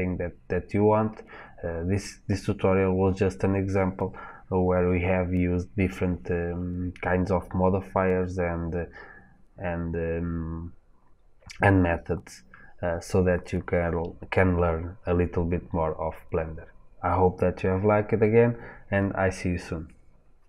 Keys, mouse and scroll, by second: 11.1-11.9 scroll up 2, 11.9-13.1 scroll up 1, 13.1-15.0 scroll up 1.